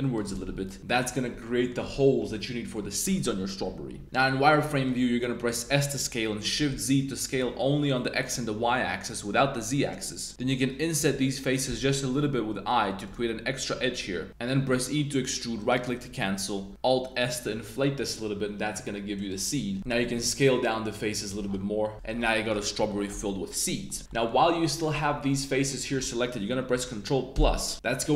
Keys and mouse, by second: 0.1 shift+click, 0.3 Tab, 0.6-1.0 drag, 1.4-1.7 drag, 2.3-2.7 drag, 3.9 Tab, 4.0 click, 4.0 z, 4.5 middle click, 5.6 s, 6.5 shift+z, 11.0 i, 13.0 shift+click, 15.0 e, 15.5 middle click, 15.6-16.6 drag, 16.7 alt+shift+s, 19.8 super+z, 20.0 s, 21.2 click, 21.4 Tab, 22.2 drag, 22.4 middle click, 22.8 middle click, 23.6 middle drag, 24.0 Tab, 24.0 middle drag, 24.6 middle click, 24.9 z, 25.7 click, 25.7 middle click.